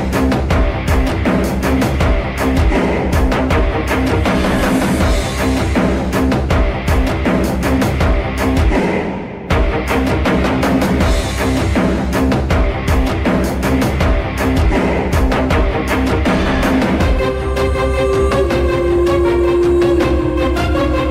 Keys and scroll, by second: 0.0-0.2 typing, 2.5 m, 9.7-12.0 typing, 14.1 F3, 15.2-16.8 typing.